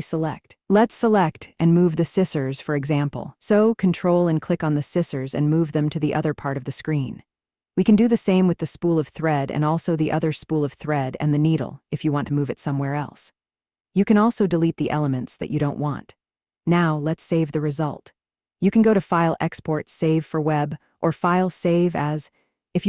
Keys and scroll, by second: 13.8 Delete.